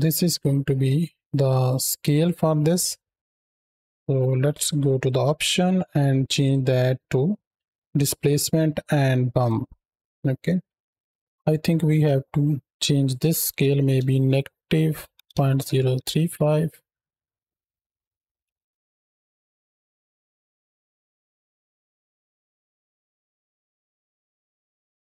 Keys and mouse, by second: 1.2 click, 3.1 click, 3.1 n, 4.8 click, 6.2-9.3 drag, 11.1 n, 11.8 middle click, 13.0-16.3 drag, 17.3-17.7 middle drag, 18.0 shift+middle drag, 18.4-19.3 middle drag, 19.3 space, 20.0-21.3 shift+drag, 21.5-22.6 drag, 23.3-24.1 middle drag, 24.1 space, 24.8 space, 25.1 middle click.